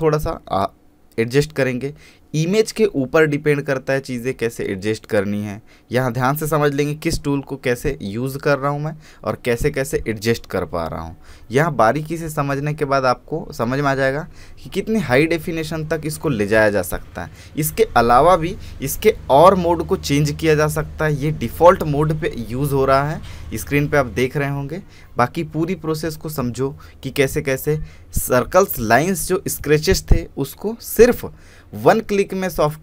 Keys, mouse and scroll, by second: 4.5-24.3 drag, 24.8-28.4 drag, 28.4-31.6 drag, 31.6-32.8 drag.